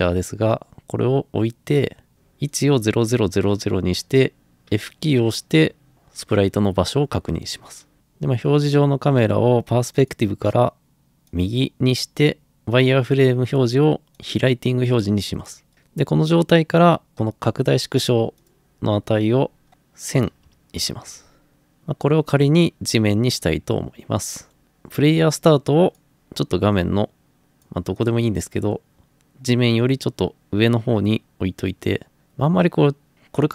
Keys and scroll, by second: 4.7 f, 20.0-21.0 typing.